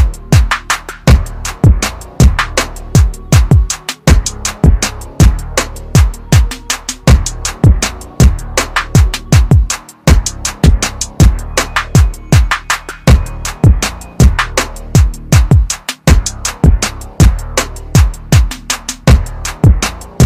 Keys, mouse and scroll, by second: 0.7 click, 1.3-1.9 scroll down 1, 1.9 scroll up 1, 2.0 scroll down 1, 4.6-6.7 scroll up 1, 7.0 click, 7.5-8.1 scroll down 1, 8.1-8.4 scroll up 1, 10.8 click, 11.3-12.8 scroll down 1, 15.1 click, 19.0 ctrl+KP_Subtract.